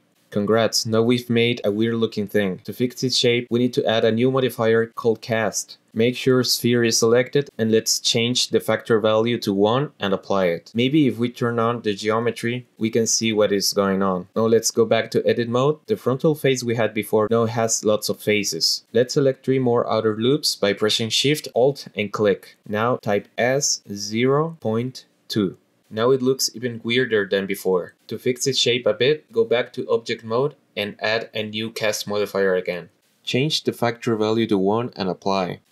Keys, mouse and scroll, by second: 5.6-6.4 drag, 8.9 click, 10.1 click, 11.0-11.3 ctrl+middle drag, 11.3-12.0 ctrl+drag, 12.8-14.0 drag, 14.1 click, 14.9 click, 16.2 click, 18.5 scroll up 1, 18.6 middle click, 19.2 shift+middle click, 19.3-19.8 scroll up 1, 20.2 alt+shift+click, 21.0 ctrl+z, 21.8 alt+shift+click, 22.2 alt+shift+click, 22.6 alt+shift+click, 23.6 s, 24.2 KP_0, 24.7 ., 25.2 KP_2, 26.1 Return, 29.2 click, 30.5-31.3 drag, 32.0 click, 35.0-35.6 drag.